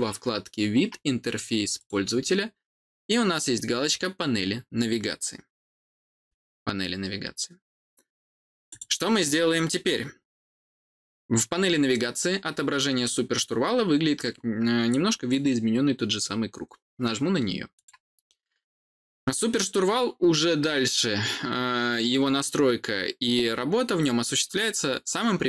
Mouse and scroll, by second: 1.7 click, 8.6 click, 17.7 click.